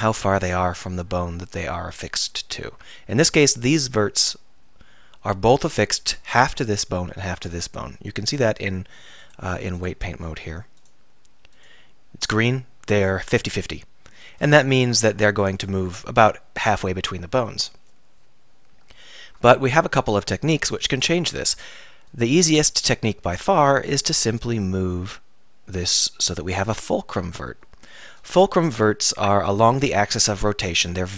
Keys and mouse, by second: 8.5 click, 19.4 Tab.